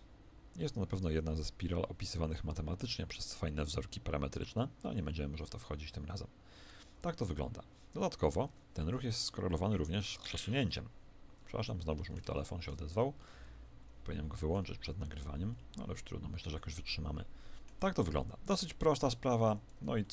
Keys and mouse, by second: 6.7 Escape, 7.3-17.3 middle drag, 8.4 alt+a, 19.3 Escape.